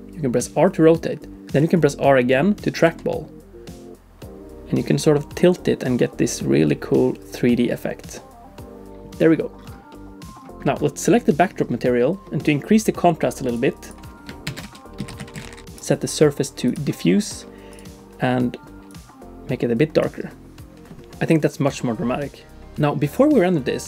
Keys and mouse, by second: 9.9 click, 10.6 middle click, 11.0 click, 13.5 click, 13.9-15.7 drag, 15.8-17.0 drag, 17.7 click.